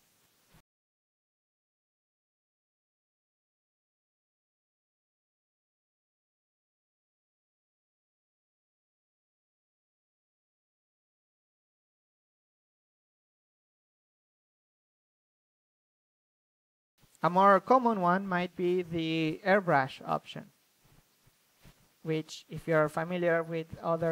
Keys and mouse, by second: 2.1 ctrl+z, 2.5-3.9 drag, 3.7 ctrl+z, 4.3-5.8 drag, 6.6 click, 6.8 a, 6.9 a, 7.3 a, 7.8 click, 8.2 a, 8.7-10.4 middle drag, 8.9-10.5 drag, 11.5 ctrl+z, 12.1-13.3 drag, 12.1 f, 13.1 a, 14.0-15.1 drag, 14.6 a, 15.1 f, 15.6 click, 15.7-16.9 middle drag, 16.9 click, 19.2 click, 22.2-23.8 middle drag, 22.6-24.0 drag.